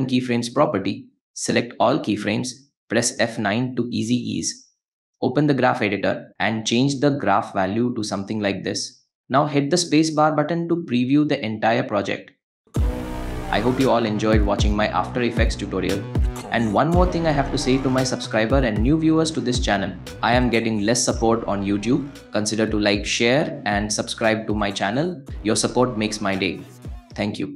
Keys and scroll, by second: 2.2 F9, 9.3 space, 11.5 space.